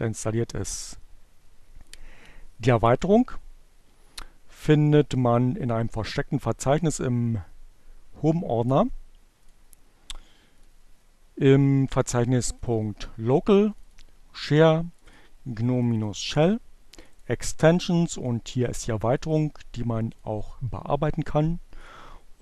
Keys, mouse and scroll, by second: 5.0-6.4 drag, 8.0 click, 9.9 click, 11.3 click, 12.9 click, 13.9 click, 15.5 click, 17.7 click, 18.5 click, 19.7 click, 21.2 click.